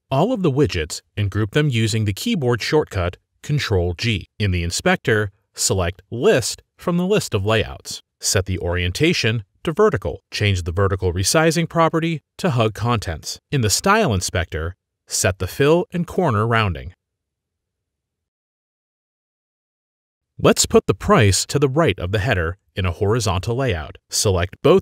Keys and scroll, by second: 2.1 ctrl+g, 7.1 ctrl+g, 18.8-19.8 typing.